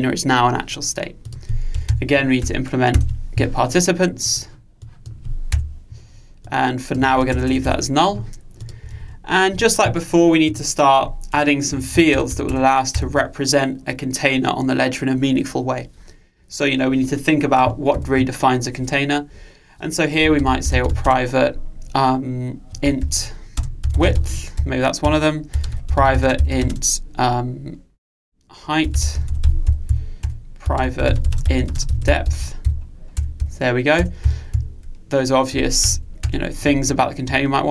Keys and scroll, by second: 1.9 alt+Return, 7.2 super+c, 8.9 super+v, 12.1 Delete, 18.0 ctrl+alt+o.